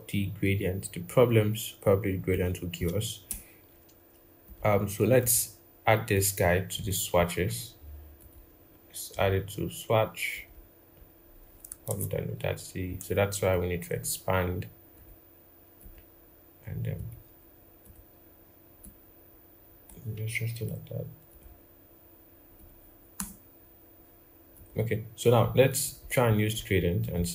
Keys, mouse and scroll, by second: 2.6-3.1 scroll up 1, 3.1 typing, 11.7 ctrl+z, 23.0 Return, 26.1-27.3 scroll down 1.